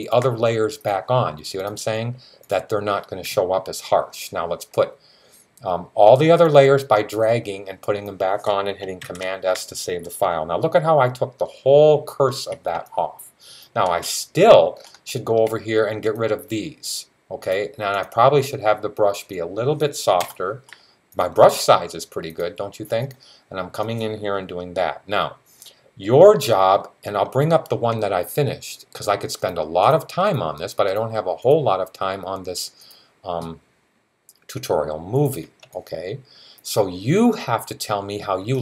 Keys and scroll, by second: 8.8 super+s.